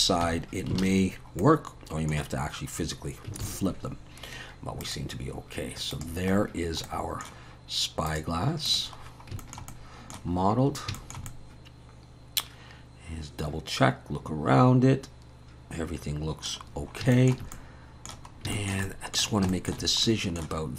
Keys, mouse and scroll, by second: 0.3 Tab, 0.8 alt+a, 1.1-1.5 scroll down 3, 1.4 middle click, 2.3-3.3 scroll down 1, 4.1 ctrl+s, 4.8 click, 6.9 middle click, 8.1 click, 8.7 click, 9.0-9.3 scroll down 4, 9.4 shift+middle click, 9.7 middle click, 10.3-11.0 scroll up 6, 11.0 shift+middle click, 11.3 middle click, 16.7-17.1 scroll down 3, 17.1 shift+middle click, 17.5 middle click, 18.3 scroll up 2, 18.5 shift+middle click, 18.9 middle click, 19.5 shift+middle click, 20.1 middle click.